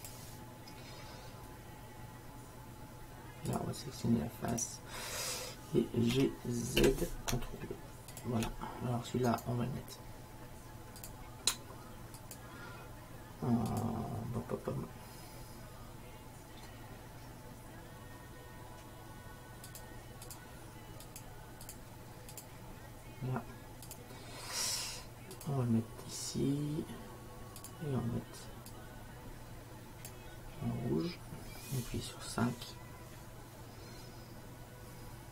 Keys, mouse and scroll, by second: 3.6-5.5 drag, 6.2 g, 9.5-11.3 right drag, 11.1-12.4 drag, 12.5-15.7 drag, 19.8-25.6 drag, 27.7-28.8 drag, 28.9 click.